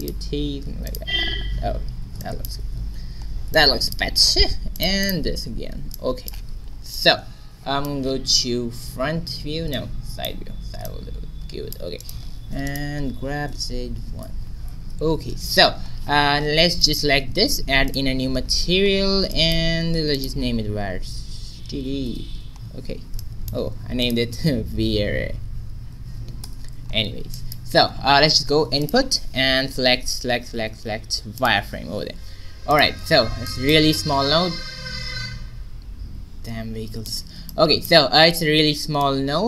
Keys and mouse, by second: 1.9 middle click, 2.6 Tab, 4.7-6.9 middle drag, 6.4 a, 8.2 q, 10.5 middle click, 12.5 right click, 13.1 g, 16.3 a, 17.8-19.6 drag, 17.8 right click, 19.6 middle click, 20.1-22.4 drag, 22.4-24.0 middle drag, 24.0-25.8 drag, 27.7 shift+a, 34.7-39.4 drag.